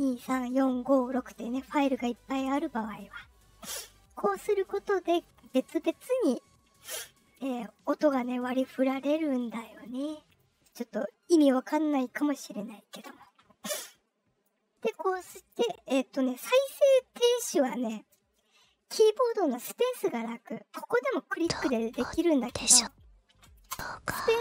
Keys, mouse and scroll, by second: 5.3 click, 5.6 click, 6.1 click, 6.8 click, 7.3 click, 7.7 click, 8.0 click, 8.4 click, 9.0 click, 9.3 click, 9.7 click, 10.2 click, 14.4-14.8 drag, 21.2 click, 21.5 click, 21.8 click, 22.0 click, 22.4 click, 22.7 click, 23.6-24.4 typing.